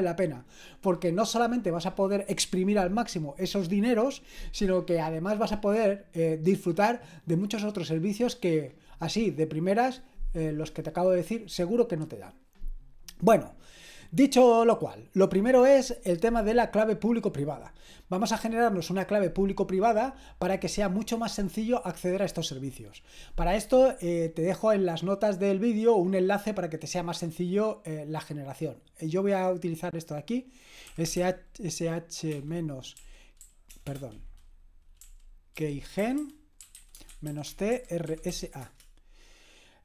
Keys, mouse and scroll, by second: 24.5-25.8 scroll down 1, 25.8-26.4 scroll down 1, 26.4 scroll up 1, 29.9 click, 30.7-33.8 typing, 35.0-38.8 typing.